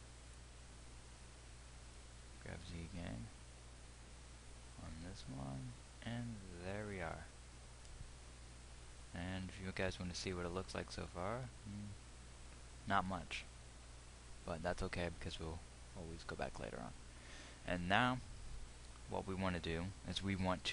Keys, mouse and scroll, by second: 0.7-3.2 drag, 3.2 g, 9.9 z, 11.0 z, 15.9 z.